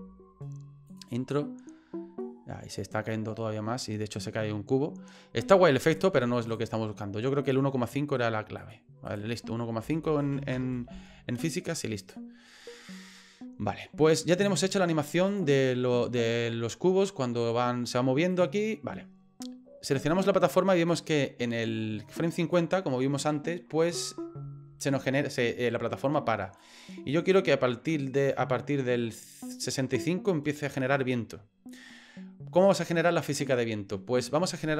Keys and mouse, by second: 0.9 click, 5.9 click, 6.5 click, 7.5-8.7 drag, 9.0-11.2 drag, 12.0 click, 15.3 click, 18.3 click, 20.1 right click, 20.9-22.5 drag, 26.6-31.7 drag.